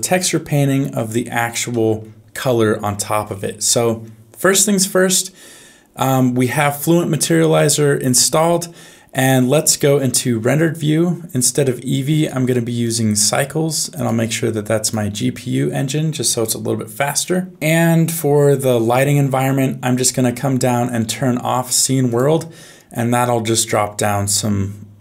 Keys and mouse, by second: 1.7 middle click, 9.6 z, 11.5 click, 12.1 click, 13.9-15.2 drag, 17.3 shift+middle click, 17.6-23.6 drag, 24.9 shift+middle click.